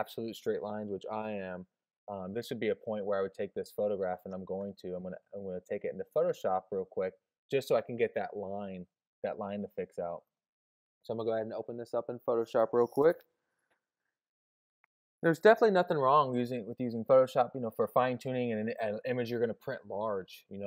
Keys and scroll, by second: 1.2 alt+super+o.